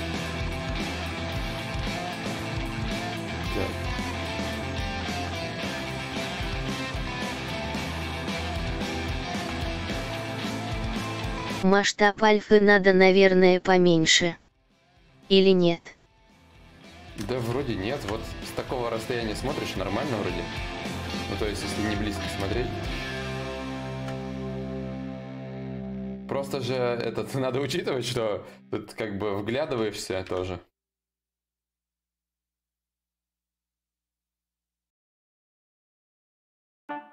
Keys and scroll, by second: 0.0 x, 31.1 ctrl+y, 31.2 ctrl+z, 31.6 x, 36.6 ctrl+z.